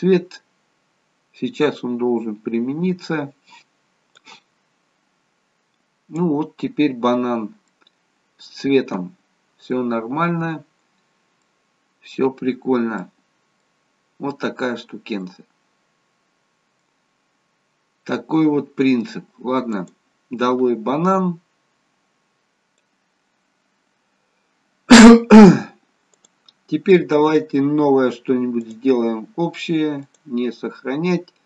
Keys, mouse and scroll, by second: 19.9 click, 21.6-22.1 scroll down 1, 22.1-22.4 scroll up 1, 26.4 click.